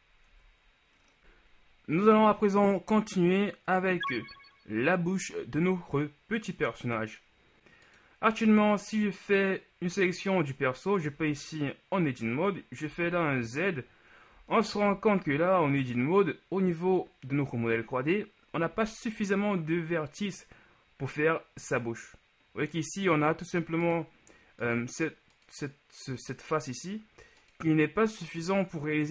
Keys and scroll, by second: 0.4 Tab, 11.3 Tab, 18.9 z.